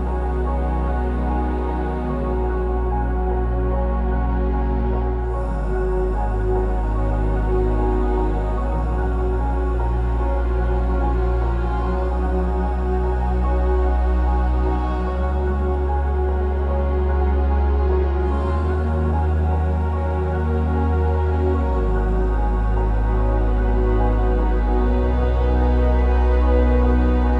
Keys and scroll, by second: 1.6 p, 1.7 Return, 5.3 ctrl+z, 6.5 ctrl+z, 7.7 Escape, 13.1 typing, 13.2 Return, 19.2 Escape, 19.6 typing, 20.1 Return, 20.1 ctrl+z, 22.6 Escape, 22.7 Escape, 25.6-26.4 typing.